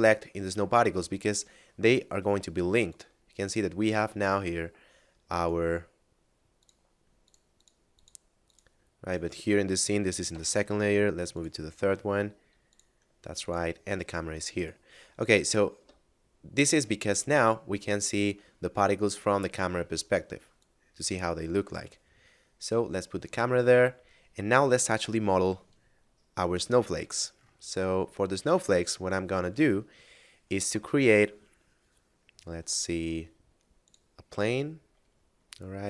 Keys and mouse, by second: 0.9 middle click, 2.7 shift+click, 3.7 shift+middle click, 5.3 right click, 6.6 click, 9.2 right click, 10.3 m, 11.3 click, 13.4 shift+click, 14.5 right click, 15.7 KP_0, 20.5 click, 22.0 middle click, 25.1 KP_7, 26.2 middle click, 28.8 shift+a, 33.7 click.